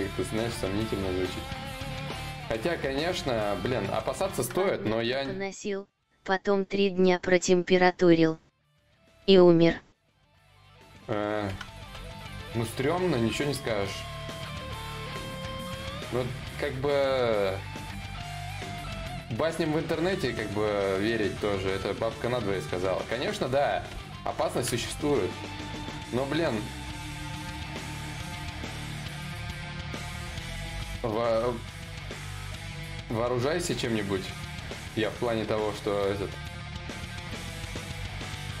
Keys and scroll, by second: 0.0-0.5 typing, 1.8 ctrl+z, 7.1 ctrl+z, 7.1 y.